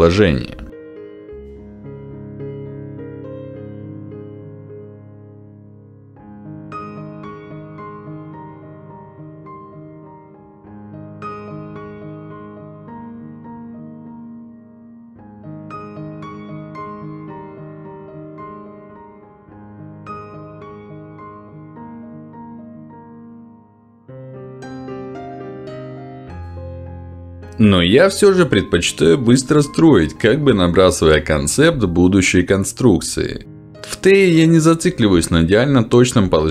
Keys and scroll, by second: 2.2 w, 12.0 e, 20.1 ctrl+z, 23.2 ctrl+z, 27.8 ctrl+z, 32.3 Escape, 32.7 q, 33.8 w.